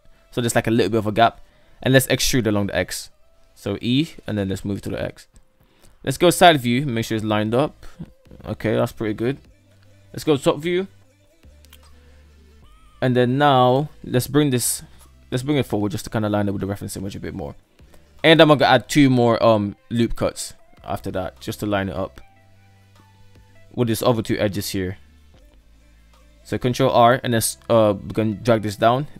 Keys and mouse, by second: 2.2 e, 4.6 middle click, 5.7 Tab, 5.9 KP_3, 6.4 Tab, 9.0 KP_7, 9.4 Tab, 11.2 click, 12.5 click, 14.5 g, 18.4 right click, 19.8 g, 22.6 shift+middle click, 25.9 ctrl+r, 28.4 ctrl+r.